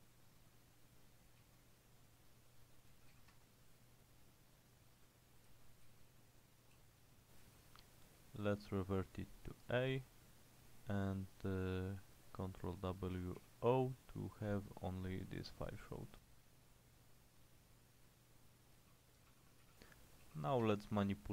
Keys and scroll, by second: 1.2-3.7 typing, 5.6-8.9 typing, 13.2 ctrl+w, 13.5 o, 14.6 typing, 18.8-20.8 typing.